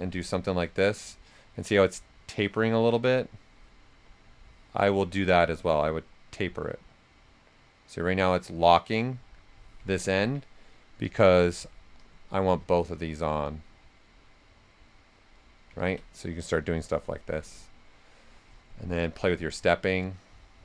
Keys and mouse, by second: 3.0-4.3 drag, 4.3 click, 5.1 right click, 5.8-9.8 drag, 9.8 ctrl+z, 11.0-15.8 drag, 15.8 ctrl+z, 16.5 click, 19.0-20.6 drag.